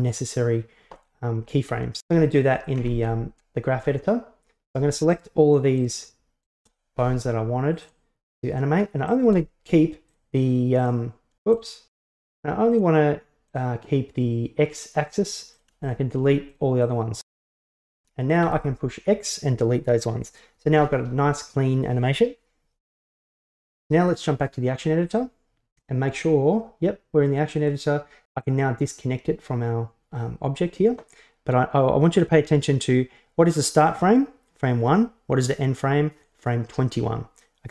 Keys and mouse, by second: 2.8 ctrl+Tab, 5.2 shift+right drag, 5.8 shift+right click, 6.5 shift+right click, 7.9 click, 9.1 click, 10.8 click, 11.7 click, 12.7 click, 13.5 click, 14.8 click, 15.6 click, 15.9 shift+drag, 16.4 shift+click, 16.6 shift+drag, 17.0 shift+drag, 17.2 shift+drag, 17.6 shift+click, 18.5 x, 24.0-25.2 drag, 26.0-27.7 middle drag, 32.2-36.3 drag.